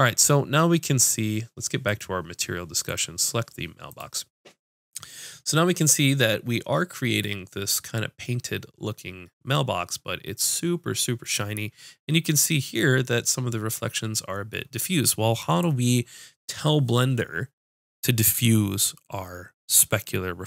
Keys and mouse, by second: 0.0 middle click, 1.9-20.4 drag.